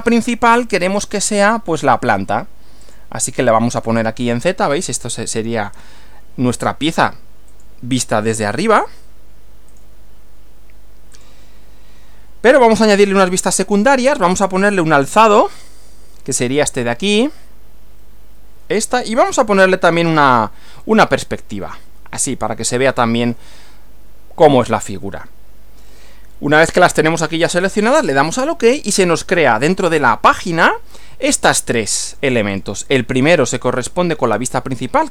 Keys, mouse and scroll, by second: 0.8 click, 2.9 click, 7.5 click, 8.7 click, 9.7 click, 11.1 click, 15.5 click, 20.1 click, 28.3 click, 29.8 click, 30.3 scroll down 2, 31.6 click, 32.1 click, 32.5 click, 33.1 click.